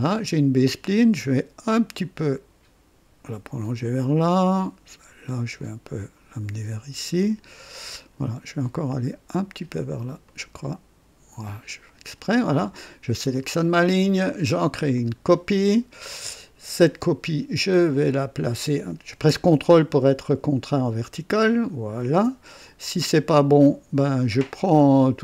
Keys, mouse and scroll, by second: 0.0 right click, 1.9-4.0 drag, 5.5-7.9 drag, 10.2-12.0 drag, 13.2 click, 14.9 click, 21.4 ctrl+click, 23.3 right click, 24.3 click.